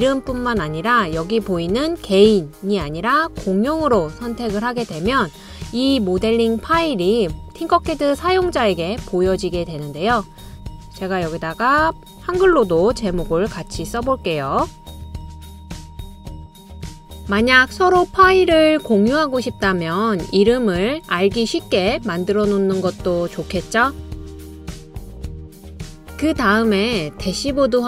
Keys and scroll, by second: 11.3 typing, 12.4-16.7 typing.